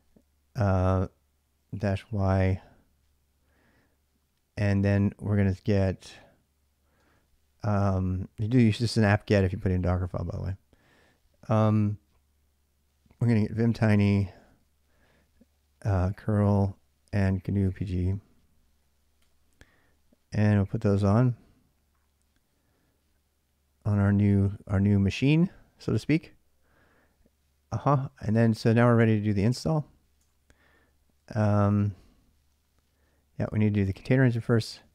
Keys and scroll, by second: 1.5 typing, 6.8 space, 12.9-19.5 typing, 23.2 typing, 27.6-28.5 typing, 29.2 ctrl+a, 29.4 ctrl+a, 30.0 ctrl+[, 30.1-34.9 typing.